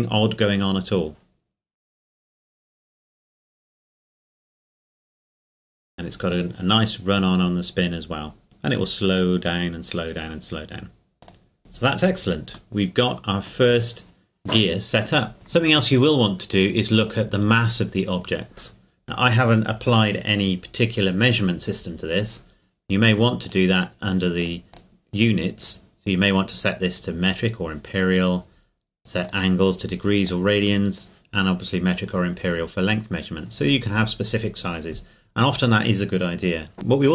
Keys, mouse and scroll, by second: 0.1 scroll down 1, 11.2 click, 12.7 middle click, 17.0 right click, 23.4 click, 24.7 scroll up 1, 24.7 click, 29.2 click, 36.5 scroll up 2, 36.7 right click.